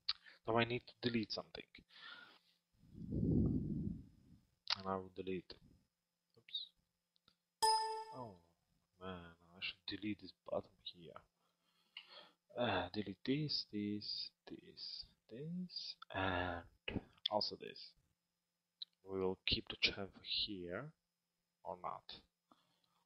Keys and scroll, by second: 11.7 Delete.